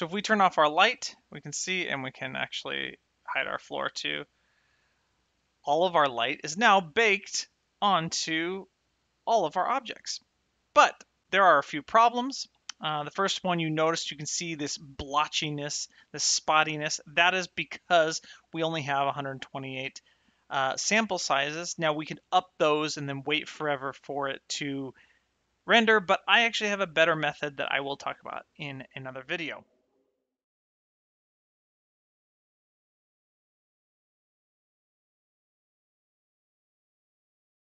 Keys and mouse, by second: 0.6 click, 3.2 click, 4.6 shift+middle click, 5.3 middle click, 6.0 shift+right click, 6.3 middle click, 10.9 shift+middle click.